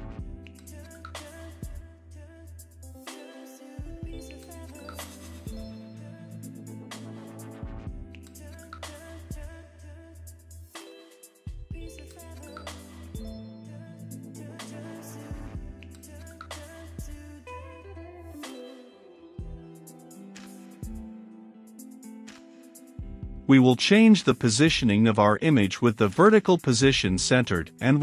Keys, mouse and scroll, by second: 0.8 Up, 1.1 Return, 2.3 click, 3.0 i, 3.1 c, 3.1 o, 4.1 Down, 4.8 Return, 5.9 click, 7.2 ctrl+x, 7.8 click, 8.4 Return, 8.7 ctrl+v, 9.6-12.6 drag, 12.6-13.9 middle drag, 13.9-14.9 drag, 14.9 >, 16.5 ctrl+s, 17.9-28.0 drag.